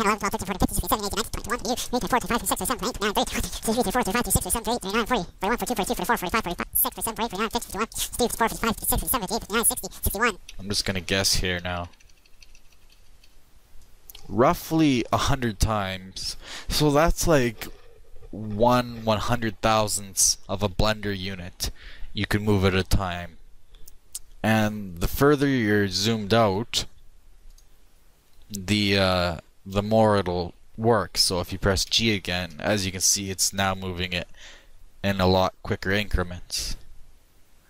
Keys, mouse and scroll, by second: 1.3-3.9 middle drag, 26.0 click, 28.0-29.4 middle drag, 30.5-31.9 shift+middle drag, 31.9 shift+g.